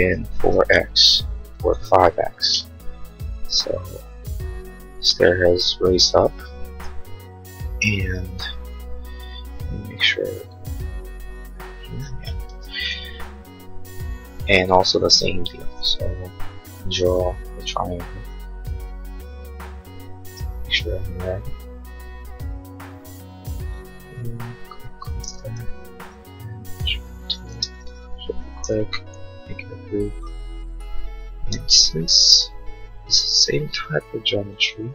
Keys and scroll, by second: 0.2 4, 0.5 x, 1.8 5, 2.1 x, 9.1 l, 11.8 Escape, 12.6 space, 16.0 l, 25.6 p, 27.5 space, 28.6 g, 31.6 m.